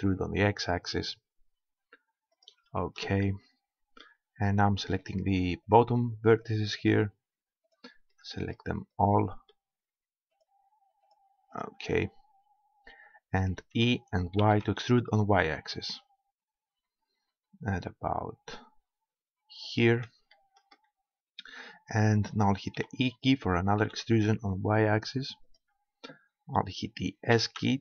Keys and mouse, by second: 2.4 click, 3.3-5.0 middle drag, 5.0-13.3 right drag, 13.7 e, 19.8 click, 20.4-22.1 middle drag, 22.7 e, 25.5-27.3 drag, 27.3 s.